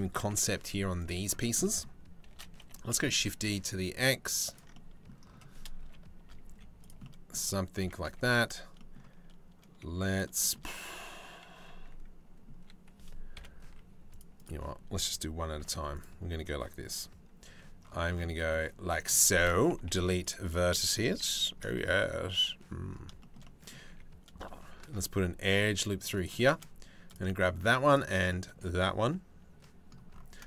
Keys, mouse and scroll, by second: 0.2 z, 1.9 shift+d, 4.4 click, 5.4 KP_Decimal, 6.1 z, 7.4 Tab, 7.7 a, 8.4 click, 9.5 z, 10.0 shift+middle click, 10.3-12.1 drag, 13.0 KP_7, 13.3 z, 15.2 z, 17.1 c, 19.4 Delete, 20.7 z, 23.5 2, 24.5 ctrl+r, 27.9 click, 30.1 click.